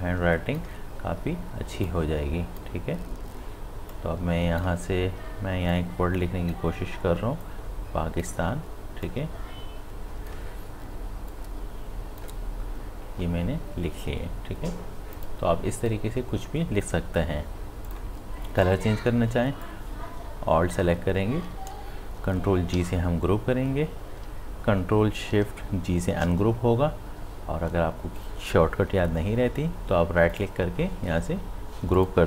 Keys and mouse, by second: 15.1 click, 17.9-22.7 drag, 22.7 ctrl+g, 26.1 ctrl+shift+g, 30.3 right click, 32.0 click.